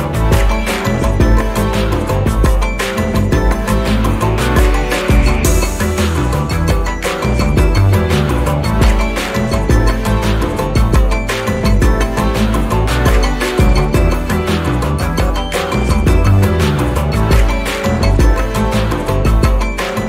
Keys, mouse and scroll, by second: 0.4-1.0 ctrl+scroll up 4, 1.3 ctrl+click, 2.7-4.3 ctrl+drag, 5.6 ctrl+d, 5.9 ctrl+click, 6.7 ctrl+d, 7.0 ctrl+click, 9.3 shift+click, 10.1 shift+click, 11.4 ctrl+KP_Add, 14.0 click, 15.8 click, 17.5 click, 18.5-20.0 ctrl+shift+drag.